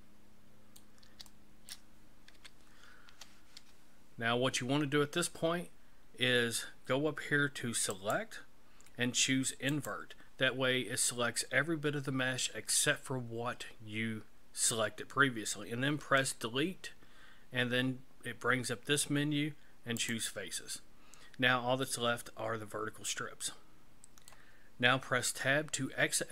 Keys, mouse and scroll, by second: 1.3 shift+middle click, 2.4 KP_1, 8.0 click, 16.2 Delete, 21.9 middle click, 25.3 Tab.